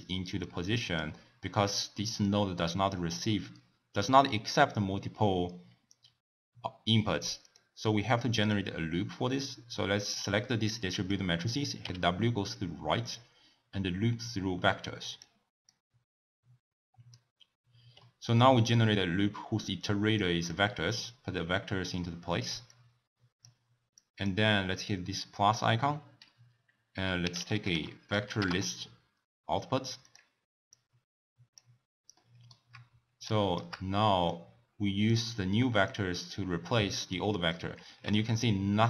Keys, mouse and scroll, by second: 2.2-5.3 drag, 7.4 click, 11.8 w, 15.7 click, 18.0-18.4 middle drag, 18.4-20.2 scroll up 2, 20.2 click, 21.0-22.9 drag, 23.9-28.2 drag, 30.8 click, 32.1-33.3 middle drag, 33.3 shift+right click, 34.3 click, 35.9-37.2 drag, 38.0 ctrl+x.